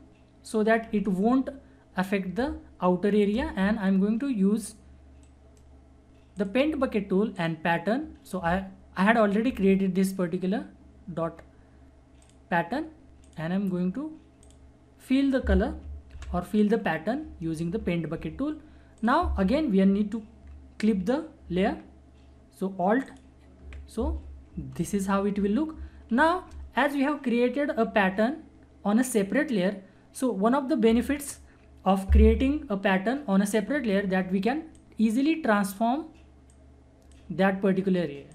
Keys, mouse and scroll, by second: 5.2 right click, 6.3 click, 12.2 click, 16.1 ctrl+d, 18.9 click, 19.0 click, 23.0 alt+click, 24.7 ctrl+=, 26.2 ctrl+-, 34.7-38.3 drag.